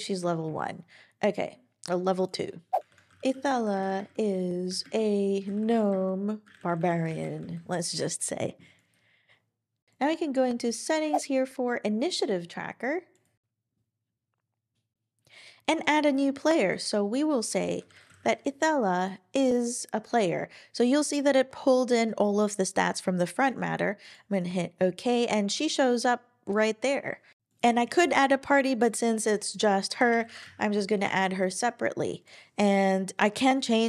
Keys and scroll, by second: 0.4 Down, 2.6-7.6 typing, 9.2-9.9 typing, 17.7-18.7 typing, 30.0-30.9 typing, 31.0 Return.